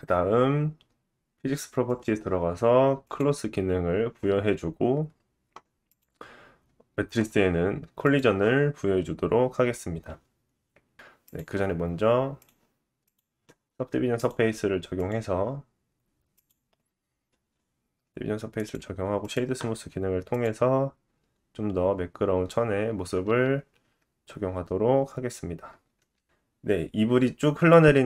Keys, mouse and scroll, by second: 1.9-4.1 drag, 5.9-8.0 drag, 10.9 space, 11.3-12.3 drag, 12.4-13.0 drag, 14.1 click, 18.5 right click, 19.3-28.0 drag, 19.3-26.2 middle drag, 19.3-26.2 right drag, 25.8 space.